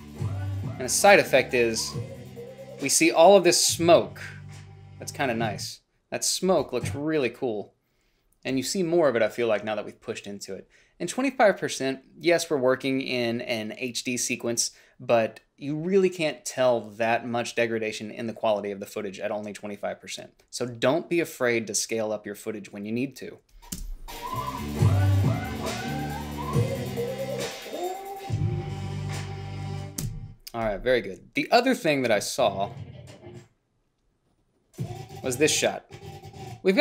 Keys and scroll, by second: 24.1 space, 30.3 space.